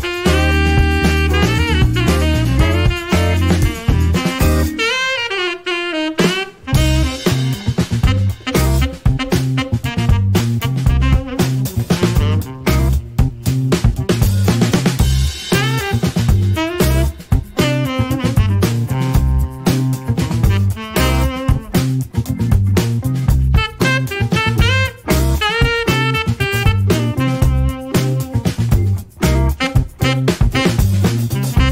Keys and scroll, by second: 2.8 alt+a, 5.3 Escape, 8.7 2, 8.8 Return, 9.9 alt+a, 20.3 Escape, 28.7-29.7 typing, 31.2 alt+a.